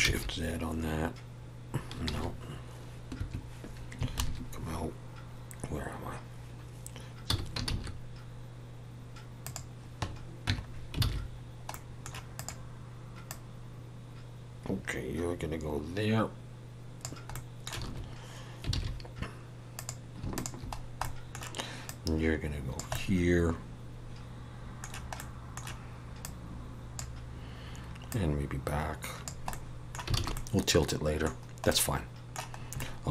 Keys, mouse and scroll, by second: 4.2 ctrl+KP_Subtract, 7.6 shift+s, 10.5 Tab, 10.7 scroll down 2, 11.0 alt+a, 11.3-11.7 scroll down 1, 11.7 middle click, 12.3 click, 13.3 click, 17.3 middle click, 18.7 alt+a, 19.7 click, 20.3 shift+click, 20.7 scroll down 2, 21.0 middle click, 21.9 click, 22.9 middle click, 25.2 middle click, 26.2 click, 28.2 click, 29.5 middle click, 30.2 alt+a, 30.3 middle click, 31.4-31.7 scroll down 1, 31.7 middle click, 32.8 middle click.